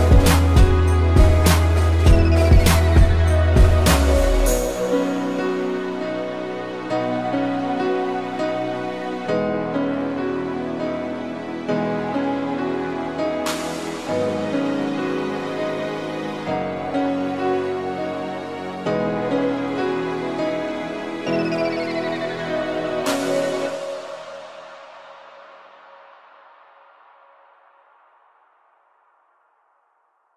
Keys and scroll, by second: 0.7 ctrl+=, 0.9 space, 3.8 ctrl+-, 4.4 space, 5.1 z, 5.6 Delete, 7.1 p, 12.5 v, 13.0 a, 15.4 space, 16.0 p, 18.5 ctrl+z, 18.9 ctrl+=, 19.2 space, 21.2 a, 22.4 ctrl+-, 23.3 space, 24.1 p, 28.1 ctrl+z, 29.3 ctrl+z, 30.1 space.